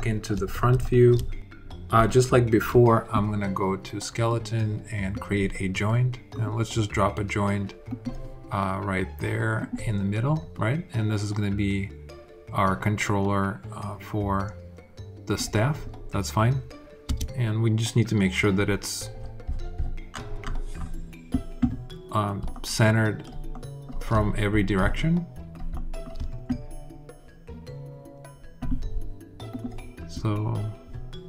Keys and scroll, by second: 16.8 space.